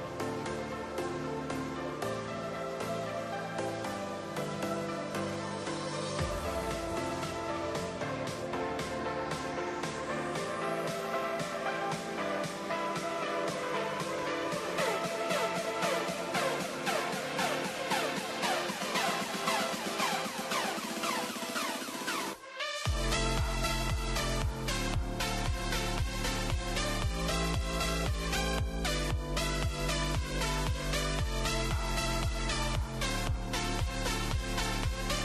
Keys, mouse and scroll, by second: 0.7 click, 1.7 click, 3.9-6.9 drag, 10.8-13.0 drag, 16.1 drag, 17.2-20.5 drag, 21.9 click, 25.0-27.5 drag, 27.9 click, 28.9 click, 30.5-32.3 drag, 32.8 click, 34.0 click, 34.5-35.0 scroll up 3, 35.0-35.2 shift+middle drag.